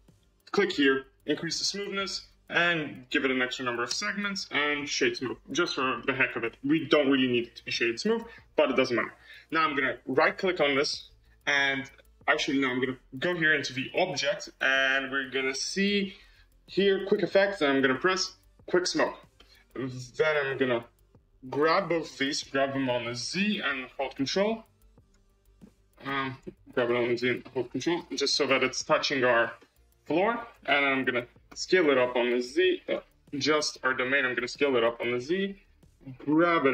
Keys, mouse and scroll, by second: 0.3-3.8 drag, 3.8 Tab, 4.1-5.9 right drag, 5.9-7.8 middle drag, 7.8-10.1 scroll down 1, 10.1-12.6 right drag, 13.8-16.3 drag, 19.3-21.0 middle drag, 21.0 click, 21.9 shift+click, 22.7 g, 25.2 scroll, 25.6-26.6 middle drag, 26.6 g, 28.1-29.2 middle drag, 29.2 scroll, 29.5-31.4 middle drag, 31.4 s, 33.2 click, 34.0 s, 35.5 scroll, 36.2 g.